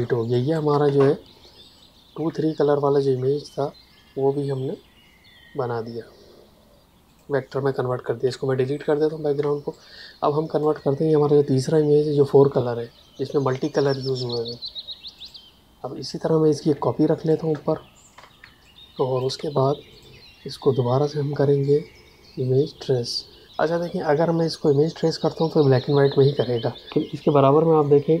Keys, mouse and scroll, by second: 0.3 click, 0.4 space, 2.1 v, 7.0 click, 8.1 Delete, 9.3 space, 9.7 click, 9.8 space, 15.1 click, 18.1 space, 18.5 ctrl+click, 19.8 click.